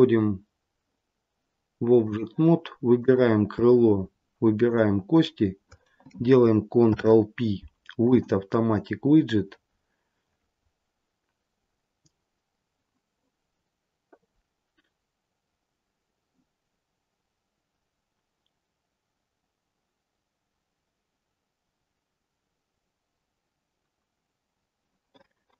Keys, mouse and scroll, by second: 2.9 click, 4.5 shift+click, 6.7 ctrl+p.